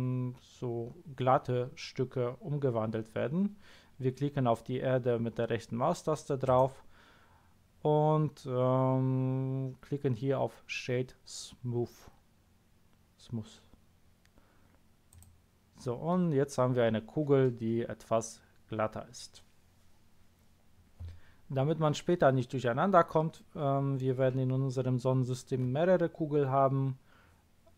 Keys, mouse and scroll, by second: 6.4 right click, 15.0 click.